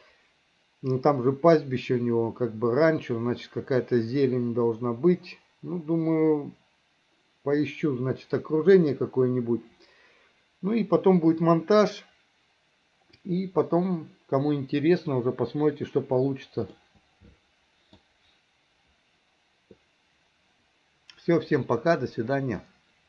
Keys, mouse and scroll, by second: 16.8-18.0 middle drag, 22.7 middle click.